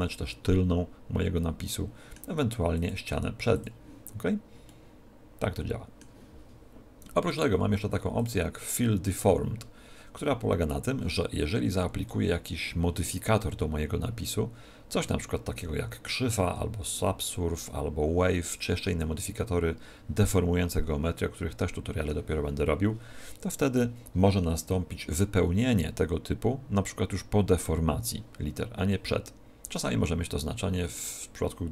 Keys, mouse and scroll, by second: 0.1 middle click, 2.7 click, 4.7 middle click, 7.2 click, 30.7 middle click.